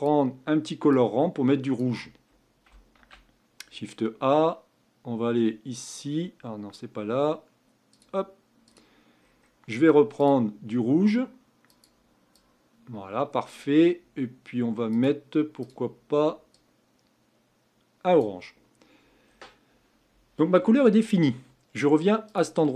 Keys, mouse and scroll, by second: 10.5 click, 15.0-16.5 drag.